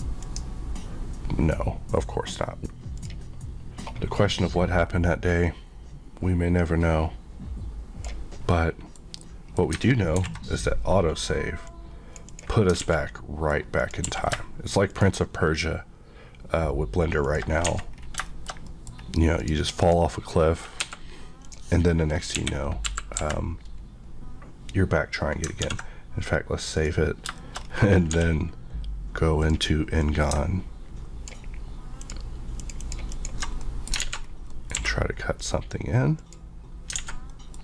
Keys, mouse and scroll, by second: 3.1 click, 6.2 Left, 8.5 middle click, 11.7 click, 12.9 alt+a, 13.1 middle click, 13.9 click, 14.1 q, 14.9 shift+click, 17.3 shift+click, 17.3 shift+Left, 17.7 alt+a, 18.0 scroll down 1, 18.3 shift+middle click, 18.7 middle click, 19.4 click, 20.3 middle click, 20.9 Escape, 21.5 click, 22.4 KP_1, 22.9 KP_5, 23.2 KP_Decimal, 25.6 ctrl+s, 26.8 click, 27.4 shift+middle click, 27.6-28.1 shift+scroll up 1, 28.1 d, 29.5 click, 30.0 click, 32.6 ctrl+click, 32.7 ctrl+click, 33.2 ctrl+click, 33.6 middle click, 34.1 alt+z, 34.3 alt+scroll down 1, 34.5 middle click, 34.8 q, 35.4 click, 37.0 alt+a, 37.3 middle click.